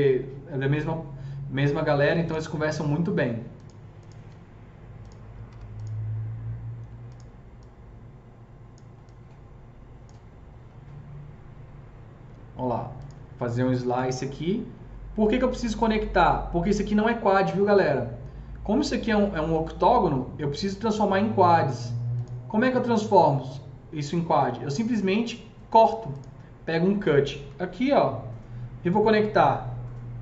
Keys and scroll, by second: 5.4 r, 13.7 super+c.